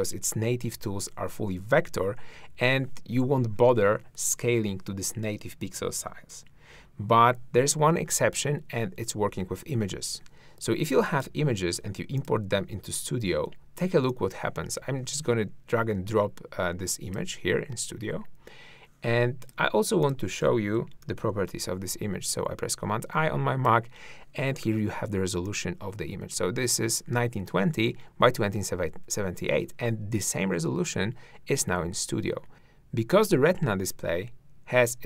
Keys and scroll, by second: 21.0 super+i, 32.5 `.